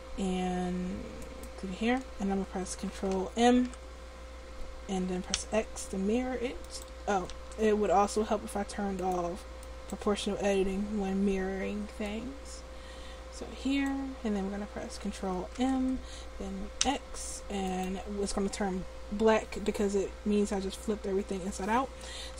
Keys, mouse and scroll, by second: 4.0 ctrl+m, 7.5 ctrl+z, 9.1-14.1 drag, 15.8 ctrl+m.